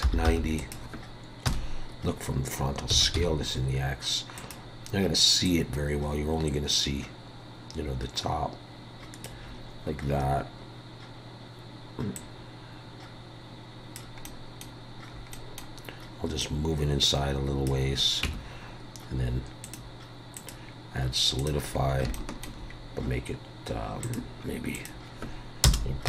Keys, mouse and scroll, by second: 1.4 KP_1, 2.9 s, 5.4 click, 12.1 click, 14.2 middle click, 15.1 scroll up 3, 15.3 middle click, 16.4 click, 18.2 Tab, 19.6 click, 20.3 click, 21.8-22.1 scroll up 3, 22.1 shift+middle click, 22.7 scroll down 1, 24.0 click.